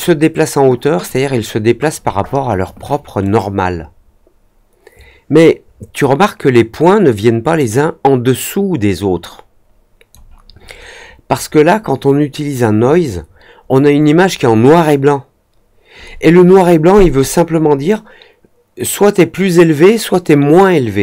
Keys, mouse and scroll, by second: 3.2-10.0 drag.